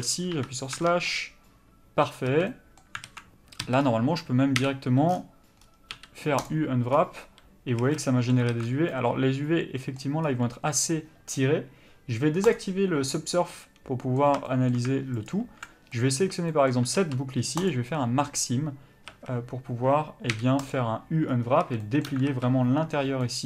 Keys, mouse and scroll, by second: 0.3 KP_Divide, 0.7 Tab, 1.1 middle click, 2.3 a, 2.5 middle click, 3.1 alt+a, 3.6 a, 3.8-4.6 scroll down 1, 5.6-5.9 scroll up 1, 6.5 u, 7.8 a, 8.0 middle click, 8.5 alt+a, 8.9 middle click, 10.2 scroll up 1, 12.5 click, 13.5 middle click, 15.3 alt+click, 15.9 middle click, 17.7 ctrl+e, 19.1 a, 20.7 u, 21.6 a, 22.3 alt+a, 23.2 middle click.